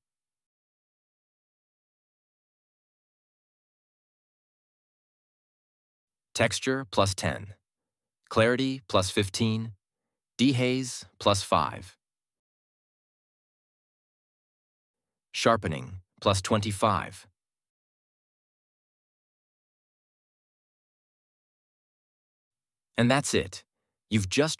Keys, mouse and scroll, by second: 0.2-1.5 drag, 7.5 click, 8.2 Left, 8.3 1, 9.6 click, 10.2-11.2 typing, 12.6 click, 13.2 BackSpace, 13.4 5, 16.0 click, 18.0-18.9 typing, 20.1 click.